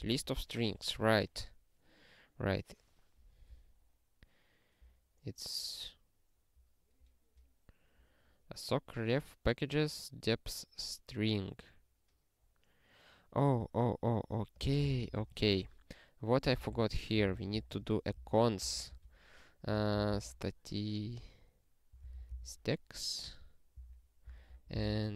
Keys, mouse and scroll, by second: 5.0 scroll up 1, 7.4 click, 12.6 scroll down 1, 13.2 scroll down 1, 14.5 click, 15.0 Return, 15.4-20.6 typing, 17.8 alt+shift+s, 18.2 ctrl+g, 21.7-22.8 typing, 23.7 ctrl+n, 24.3 ctrl+n, 24.5 ctrl+a, 24.7 Return, 24.8 ctrl+p, 25.0-25.1 typing.